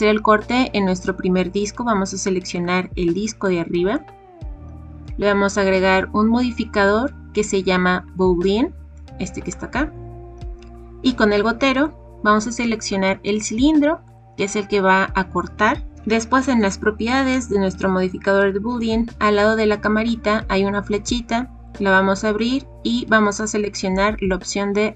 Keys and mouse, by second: 2.5 click, 3.4 middle click, 5.9-9.5 drag, 21.7-24.9 drag.